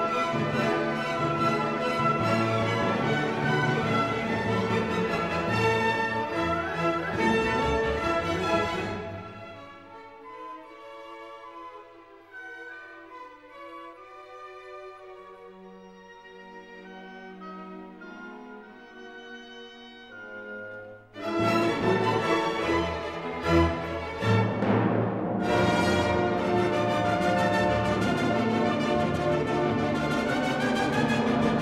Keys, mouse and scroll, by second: 0.0-2.1 drag, 2.1-11.2 drag, 11.2 click, 11.8 click, 12.4-14.0 drag, 14.0 scroll down 1, 14.6-16.7 drag, 16.7-18.1 drag, 18.1-19.5 drag, 19.5-22.7 drag, 22.7 click, 23.5-25.9 drag, 25.9 click, 26.5 scroll down 1, 27.7 click, 28.3 scroll down 1, 28.9 click, 29.5-30.1 scroll up 1, 30.1-31.6 middle drag.